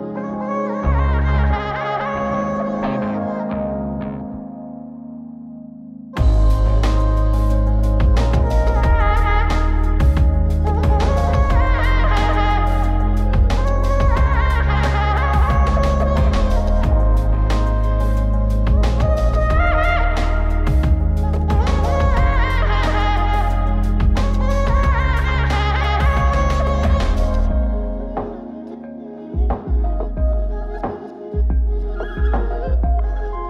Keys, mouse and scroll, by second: 1.1 click, 1.6-2.7 scroll up 3, 2.7-5.0 middle drag, 5.2 click, 5.6-7.9 middle drag, 9.9 Tab, 12.7 Tab, 13.7 click, 15.3-15.7 middle drag, 15.9-17.8 scroll up 4, 19.2 click, 20.3-20.9 scroll down 4, 20.8 middle drag, 21.1-21.8 scroll up 5, 22.2 middle click, 22.2 scroll up 1, 22.8-23.9 scroll down 2, 23.9 click, 26.2 click, 26.7 click, 28.6 click, 29.4 click, 30.6 click, 32.3 middle click.